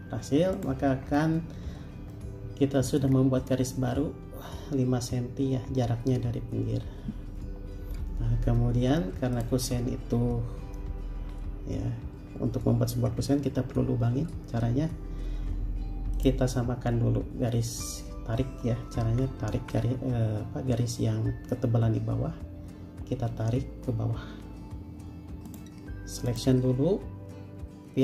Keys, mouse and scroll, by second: 0.1 space, 1.3-2.2 scroll up 1, 2.3 middle click, 3.3-3.9 scroll down 1, 4.0 scroll up 1, 4.8-5.1 scroll down 1, 11.4 m, 13.3-15.8 scroll up 1, 19.2 Escape, 20.0 space.